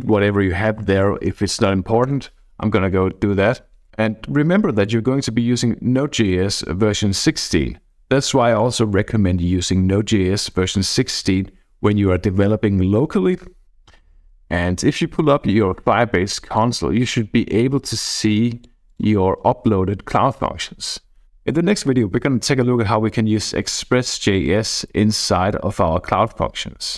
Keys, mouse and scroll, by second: 0.8 y, 2.1 Return, 13.6-16.9 drag, 18.0 click, 18.9 click, 20.0-20.7 scroll down 1, 20.7-21.2 scroll up 2.